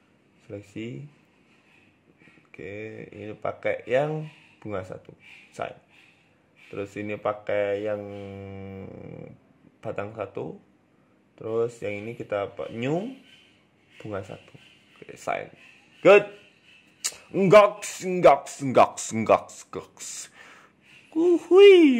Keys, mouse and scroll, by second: 0.1 alt+shift+right click, 0.9 shift+middle click, 2.0-2.5 scroll down 3, 3.3 click, 3.7 click, 4.7 click, 5.0 scroll down 3, 5.1 Tab, 5.3 middle click, 5.9 shift+middle click, 6.2 scroll up 2, 6.8 right click, 6.8 scroll up 1, 7.7 click, 11.9 Tab, 11.9 click, 12.5 click, 13.5 click, 13.8-14.5 scroll down 5, 13.9 Tab, 14.5 shift+middle click, 15.1 KP_7, 15.5-15.9 scroll down 1, 16.5 KP_0, 16.9 scroll up 3, 17.1-17.7 scroll down 8, 18.5-18.8 scroll down 2, 19.4 scroll down 1, 19.9 right click, 19.9-20.2 scroll down 5, 20.4 right click, 20.7 scroll up 3, 21.0 ctrl+alt+q, 21.4 shift+middle click.